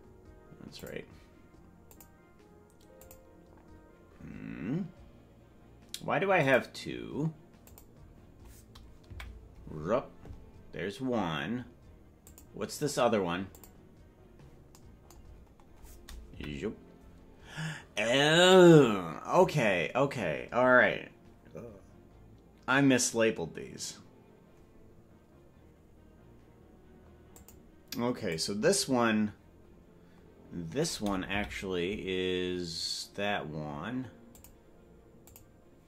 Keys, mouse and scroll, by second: 0.7 click, 0.7 scroll down 1, 1.8 click, 3.0 click, 6.4 click, 7.6 click, 8.3-9.0 scroll down 1, 9.0 KP_Decimal, 12.2 click, 13.5 click, 15.3-16.3 scroll down 6, 16.3 scroll down 2, 16.3 KP_Decimal, 27.3 click, 28.2 click, 31.3 KP_Decimal, 34.3 click, 35.2 click.